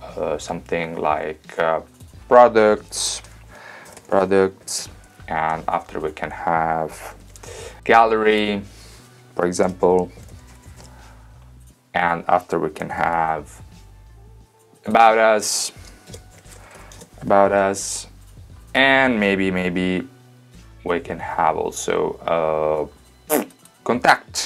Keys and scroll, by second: 2.8-5.5 typing, 7.1 super+c, 7.4 super+v, 9.6-11.4 typing, 13.0 super+c, 13.2 super+v, 16.0-18.2 typing, 19.8 super+v.